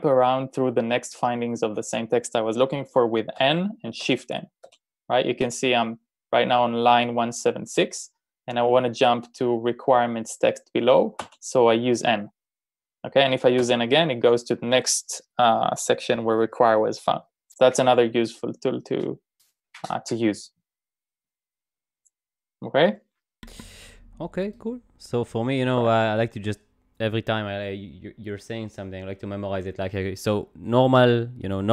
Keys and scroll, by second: 3.4 n, 4.0 shift+n, 4.7 n, 5.5 shift+n, 11.2 n, 13.6 n.